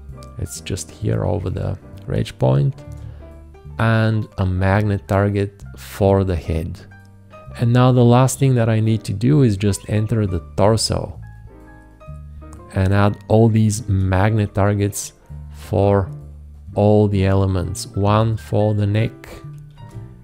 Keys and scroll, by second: 2.8 shift+`, 13.8 shift+`, 19.7 shift+`.